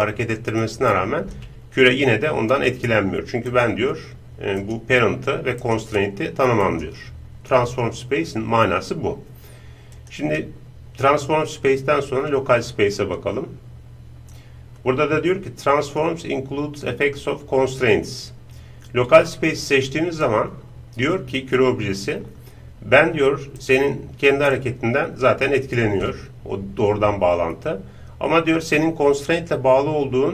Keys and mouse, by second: 0.7-2.3 drag, 3.5-8.4 right drag, 10.0-23.6 drag, 23.6-25.9 right drag, 24.6-28.8 drag.